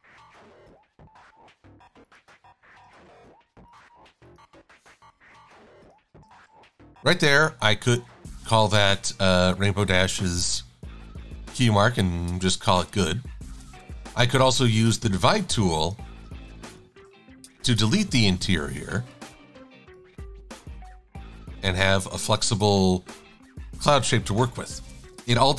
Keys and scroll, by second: 3.0 shift+super+a, 5.2 i, 6.5 shift+a, 11.6 super+z, 16.4 shift+super+a, 17.6 Delete, 18.4 v, 23.2 super+z, 23.9 shift+super+a, 25.3 super+=.